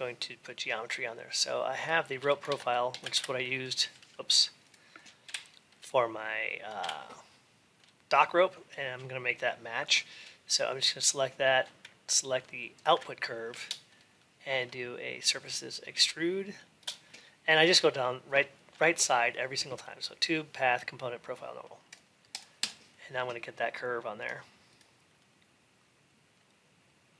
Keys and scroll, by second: 2.3 alt+x, 3.0 ctrl+r.